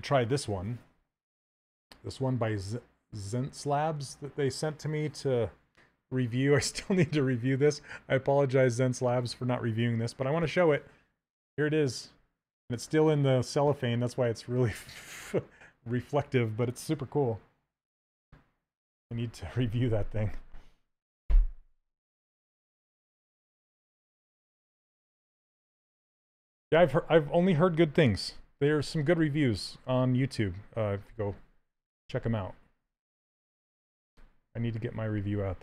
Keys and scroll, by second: 28.0 q, 31.4 s, 34.2 s.